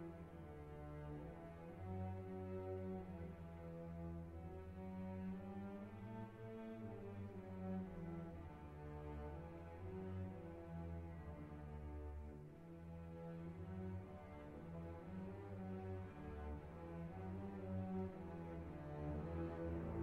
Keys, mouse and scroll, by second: 1.2-5.5 drag, 6.2-7.6 drag, 7.4 5, 7.7 0, 8.9-10.2 drag, 10.7 click, 11.1 click, 12.0 ctrl+click, 12.6 ctrl+click, 14.2 click, 17.3 click.